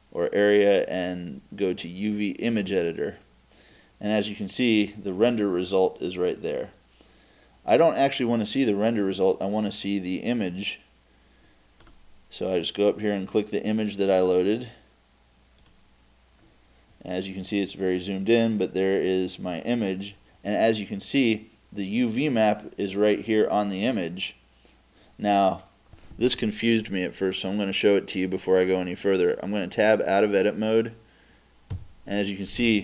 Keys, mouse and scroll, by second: 31.7 Tab.